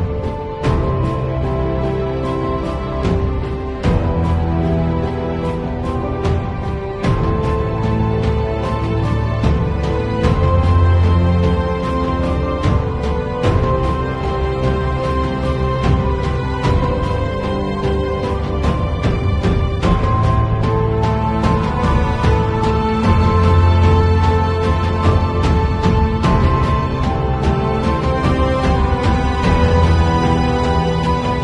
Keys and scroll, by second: 0.7 [, 1.2 ], 1.6 [, 3.1-5.2 typing, 6.4 alt+super+z, 10.4 [, 11.1 ], 11.4 [, 11.7 ], 13.3-15.5 typing, 17.2 v, 17.8 space, 21.7 super+t, 26.1 m, 27.3 d, 27.5 shift+super+n, 27.5 shift+super+Return, 27.8 alt+super+Delete, 27.9 super+v, 29.0 shift+super+e.